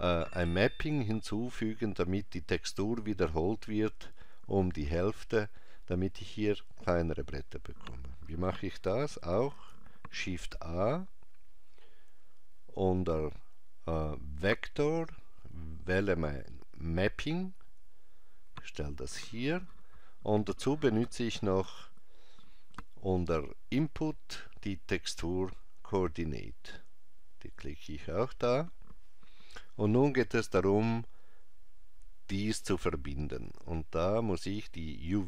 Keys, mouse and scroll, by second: 9.5 shift+a, 21.6 shift+a, 34.9 click.